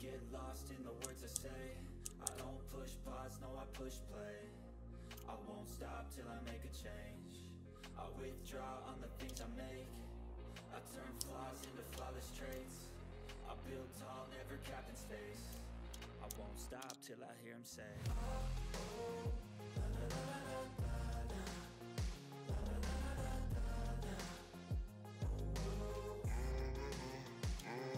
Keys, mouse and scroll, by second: 0.7-2.7 typing, 1.8 click, 2.5 click, 5.6 shift+click, 6.5 right click, 6.9 click, 9.3 ctrl+z, 9.7 click, 11.6 ctrl+scroll up 1, 11.9 ctrl+scroll down 1, 12.3 click, 12.6-15.7 shift+drag, 16.2 ctrl+g, 16.4 click, 16.8 ctrl+z, 17.1 click, 19.2 click, 22.7 click, 22.7 click, 27.6 ctrl+scroll down 1.